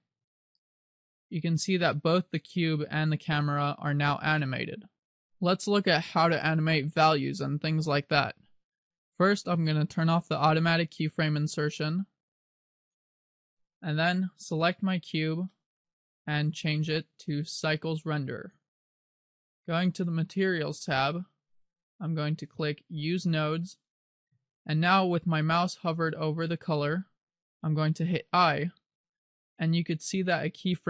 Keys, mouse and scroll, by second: 0.3 alt+a, 12.2 click, 12.9 click, 14.7 right click, 15.7 middle click, 16.9 click, 19.3-20.9 scroll up 1, 21.7 click, 23.5 click, 24.9 scroll down 1, 29.1 i.